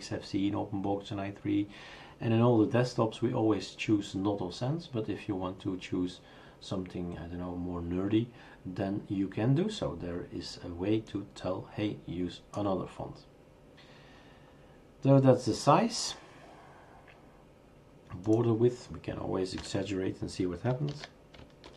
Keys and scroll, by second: 19.6 typing, 20.9 ctrl+s, 21.6 shift+super+r.